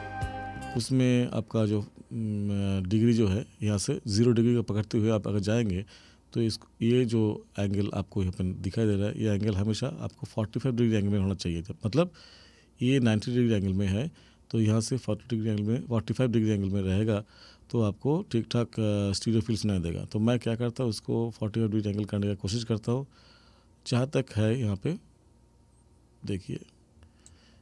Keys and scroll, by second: 0.7 space.